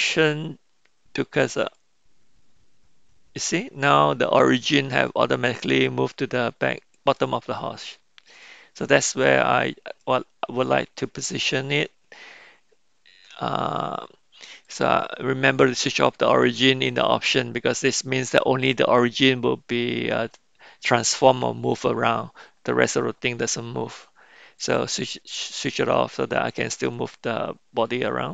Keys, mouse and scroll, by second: 5.0-7.1 middle drag, 8.4-9.4 middle drag, 10.0-11.3 middle drag, 14.8-25.4 drag, 26.3-26.7 middle drag, 26.9 middle click, 27.4-27.8 middle drag, 28.0-28.3 middle drag.